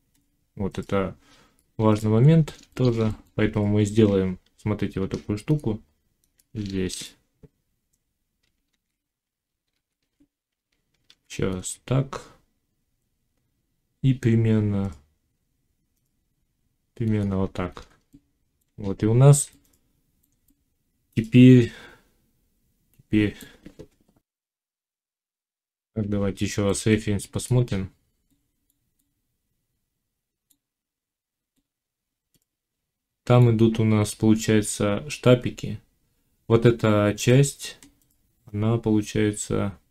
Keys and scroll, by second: 4.8 ctrl+r, 6.7 shift+Tab, 8.6 ctrl+z, 10.9 ctrl+r, 24.3 F9.